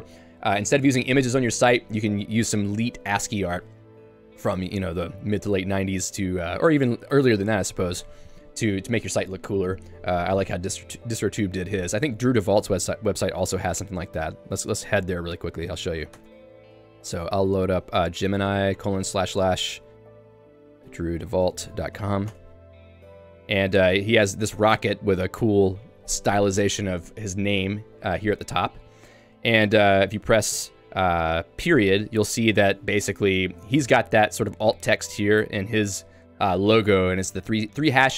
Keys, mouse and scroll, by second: 4.1 shift+v, 5.4 Escape, 16.3 Return, 22.5 Return, 24.2 j, 29.3 k, 31.7 ., 36.3 click, 36.8-38.1 typing.